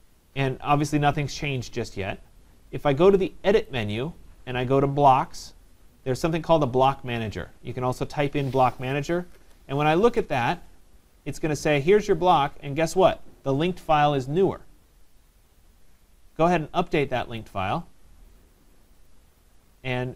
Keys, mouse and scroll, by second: 3.7 click, 9.0 click, 17.4 click, 19.1 click.